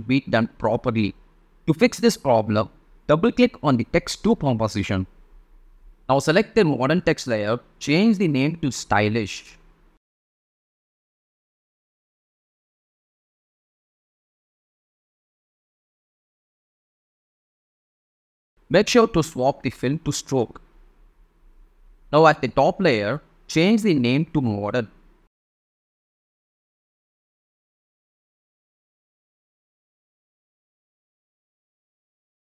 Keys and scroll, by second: 9.7-13.2 typing, 30.7-32.5 typing.